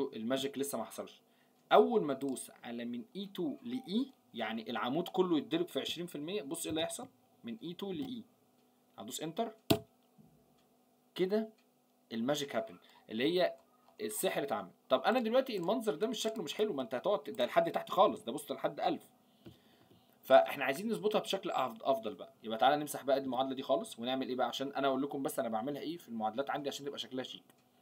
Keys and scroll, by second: 18.1 ctrl+Down, 19.4 ctrl+Up.